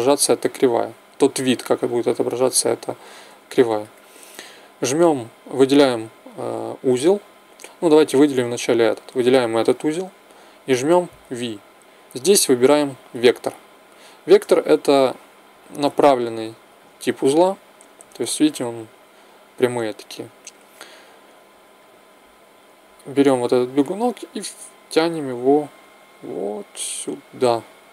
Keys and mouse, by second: 2.4-4.9 middle drag, 11.1 v, 14.9-20.5 middle drag, 21.7 middle click, 22.0 right click.